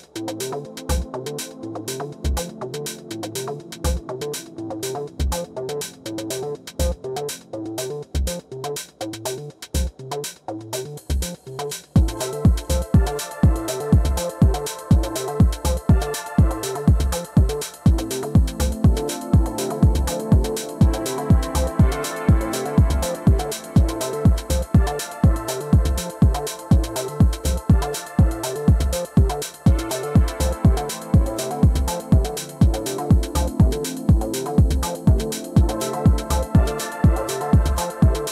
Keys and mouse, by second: 2.2 alt+middle click, 2.6 alt+click, 3.5 alt+middle click, 3.8 alt+click, 4.2 alt+click, 4.7 alt+middle click, 5.1 alt+click, 5.2-6.5 alt+drag, 6.9 alt+middle click, 11.6-15.2 right drag, 15.4 alt+click, 16.1 alt+click, 17.8 Up, 19.1 click, 19.5 alt+x, 20.0 alt+click, 21.2 ctrl+click, 22.6 alt+click, 23.8 Delete, 25.2 click, 25.9 4, 26.4 click, 27.2 alt+x, 27.6-29.7 alt+drag, 30.3 alt+middle click, 31.0 alt+middle click, 31.4-32.1 alt+drag, 32.5 middle click, 32.8 middle click, 34.5-38.3 drag.